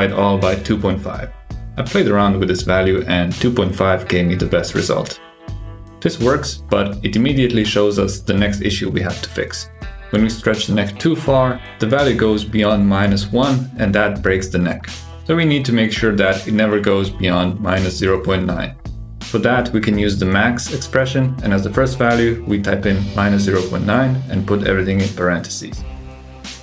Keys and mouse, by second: 0.2 shift+BackSpace, 3.2 click, 5.4 click, 5.8 g, 11.1 click, 13.7 click, 14.3 alt+g, 15.4 click, 16.6-25.9 drag, 20.0 ctrl+z.